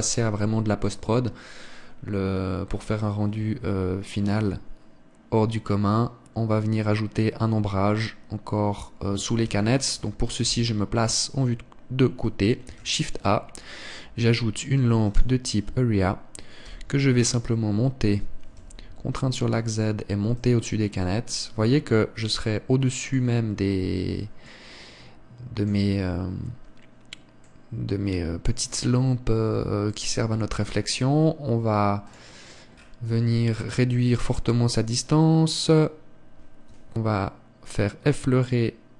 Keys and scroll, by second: 10.3 Escape, 11.3 KP_3.